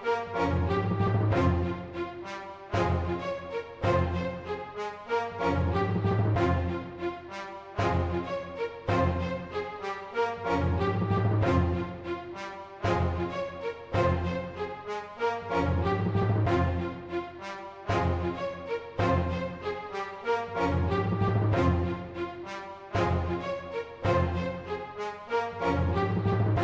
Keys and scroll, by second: 0.0-1.5 typing, 4.8-5.1 typing, 8.7-9.8 typing, 10.9 super+z, 11.2 super+z, 13.2 super+z, 15.4-16.2 typing, 18.4-19.3 typing, 19.4 super+z, 24.7 typing.